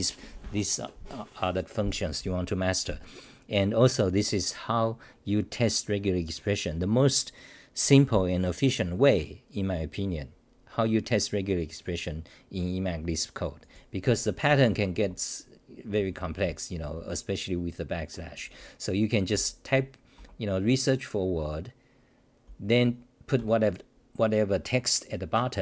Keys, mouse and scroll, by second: 14.5-17.4 typing, 19.3-21.1 typing, 22.5-23.4 typing.